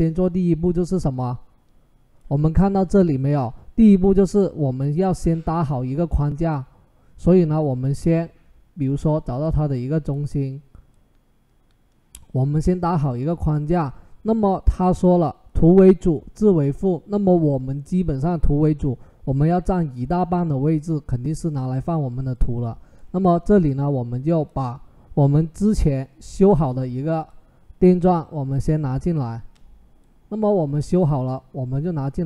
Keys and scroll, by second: 28.5 Return.